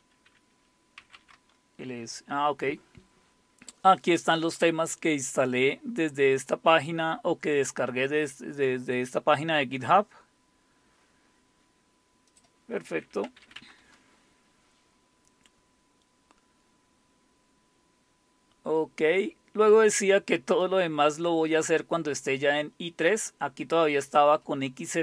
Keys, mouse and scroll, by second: 0.7-1.8 typing, 6.1-8.4 scroll up 4, 9.7-11.7 scroll down 2, 12.3 click, 12.8-14.1 typing, 16.0-17.6 scroll down 1, 17.6-18.3 scroll down 1, 18.3-20.4 scroll down 1, 20.6-23.2 drag, 23.8-25.0 drag, 23.8 typing.